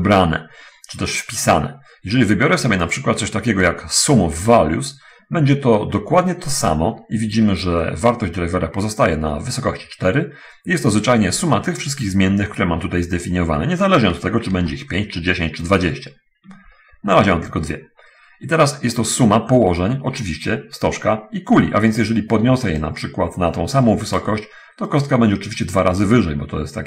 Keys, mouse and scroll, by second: 2.9 click, 7.0 click, 11.9-12.5 scroll down 1, 14.9-16.3 ctrl+middle drag, 22.3 right click, 23.3-24.7 ctrl+drag, 25.3 right click.